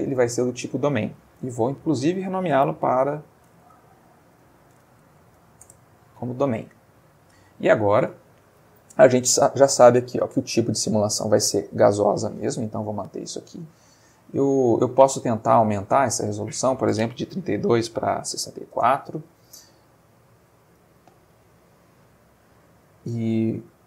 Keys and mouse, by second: 0.2-1.2 middle drag, 1.5 F2, 3.5-5.4 typing, 5.7 Return, 6.8-7.8 middle drag, 12.7-13.8 middle drag, 14.0 middle click, 16.2 click, 18.3 6, 18.7 4, 18.7 Return, 20.5-21.9 middle drag, 22.0-23.8 middle drag.